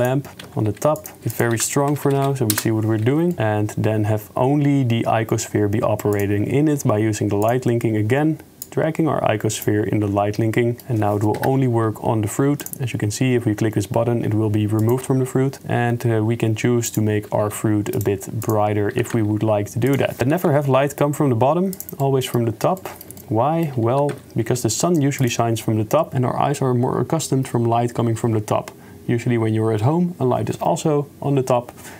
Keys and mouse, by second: 0.3 s, 0.3 g, 1.5-2.6 drag, 2.2 0, 3.3 middle click, 7.8 middle click, 8.8 click, 9.8 middle click, 10.8 middle click, 11.3 KP_0, 14.8 click, 17.4 r, 18.5 click, 19.0 r, 20.2 g, 20.2 KP_0, 20.3 r, 22.2 middle click, 22.9 shift+middle click, 23.2 middle click, 25.3 g.